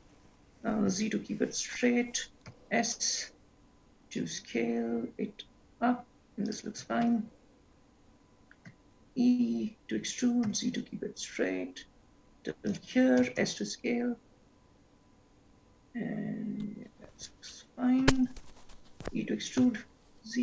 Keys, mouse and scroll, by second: 2.6 s, 8.9 e, 13.4 s, 18.4 e.